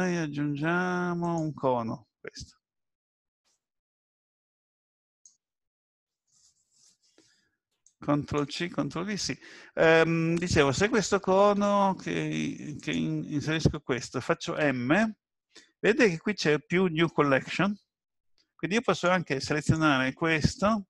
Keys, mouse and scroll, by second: 3.4 click, 7.8 click, 11.6 s, 18.9 click, 19.6 click.